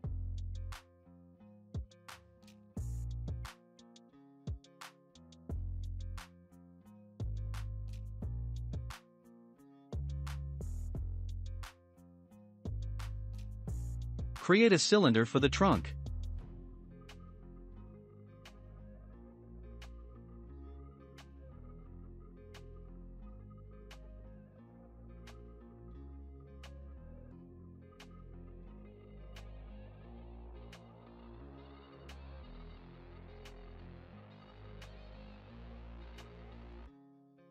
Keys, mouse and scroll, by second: 0.7 click, 2.1 click, 7.9 click, 8.3 scroll down 1, 8.5 Tab, 8.9 click, 9.6-9.9 scroll down 2, 9.9-11.3 shift+middle drag, 11.3-11.7 scroll up 2, 11.7-12.9 middle drag, 12.9 x, 13.4 shift+a, 17.8-20.0 drag, 20.0-20.5 scroll down 5, 20.5 s, 22.1-22.9 shift+middle drag, 22.9-23.2 scroll up 5, 23.3-24.0 middle drag, 24.0 click, 25.7 s, 27.1-27.4 scroll up 3, 27.4 middle click, 28.1-30.8 drag, 30.8 middle click, 31.3-33.3 right drag, 33.3 click, 34.2-34.7 scroll down 2, 34.7-35.5 shift+middle drag, 35.5-36.6 scroll down 5, 36.6 click, 37.0-37.4 scroll up 5, 37.4-37.5 middle drag.